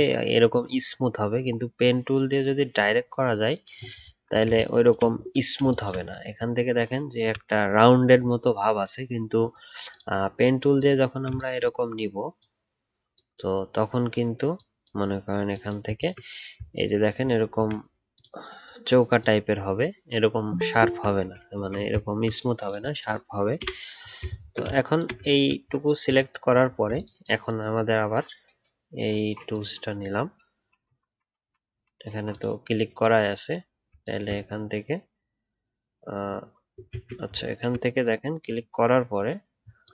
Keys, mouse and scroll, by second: 0.3-3.5 alt+scroll up 1, 3.9 alt+scroll down 1, 5.2-5.6 alt+scroll up 2, 6.3-8.9 alt+scroll up 3, 15.9 ctrl+click, 16.7 alt+scroll up 1, 20.8-22.0 alt+scroll down 1, 22.0-24.3 alt+scroll up 1, 24.3 alt+scroll down 1, 25.3 alt+scroll down 1, 25.8-26.6 alt+scroll up 1, 26.6 alt+scroll down 1, 34.0 alt+click, 37.5-39.8 alt+scroll up 1, 39.8 alt+click.